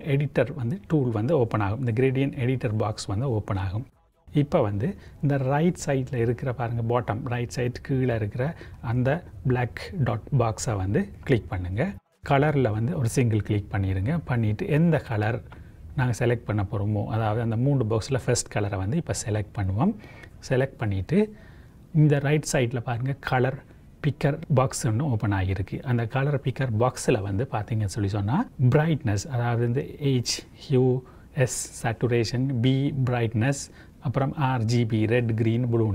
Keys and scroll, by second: 9.1 j.